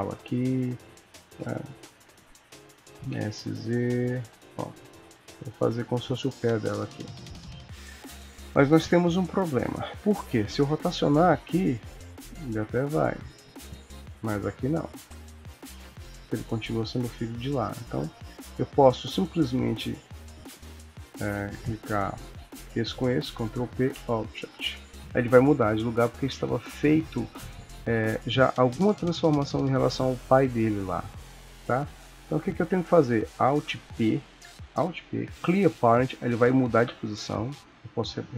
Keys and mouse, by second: 0.5 g, 2.9 s, 5.2 g, 6.4 middle click, 7.7 KP_1, 9.2 ctrl+s, 10.0 click, 10.7 r, 13.1 click, 13.4 r, 17.8 click, 21.7 shift+click, 23.3 ctrl+p, 27.1 ctrl+z, 32.2 click, 33.9 alt+p.